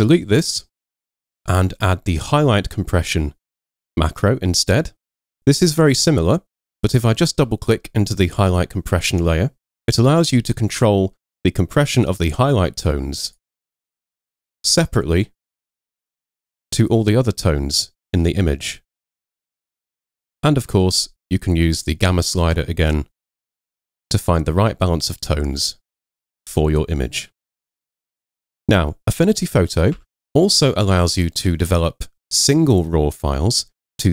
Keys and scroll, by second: 28.4 Escape, 30.0 super+0.